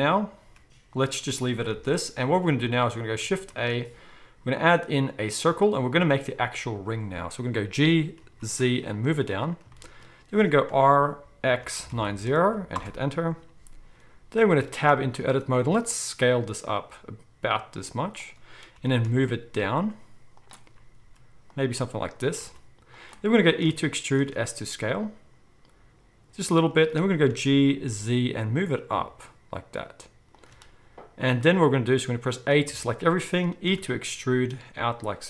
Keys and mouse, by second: 0.4 s, 1.8 alt+a, 3.5 shift+a, 7.7-9.6 middle drag, 7.7 g, 10.7 r, 14.4 Tab, 15.6 s, 18.8 g, 21.0 s, 21.7 g, 23.6 e, 27.3 g, 28.9-30.5 shift+drag, 32.7 a, 33.7-35.2 middle drag, 33.7 e.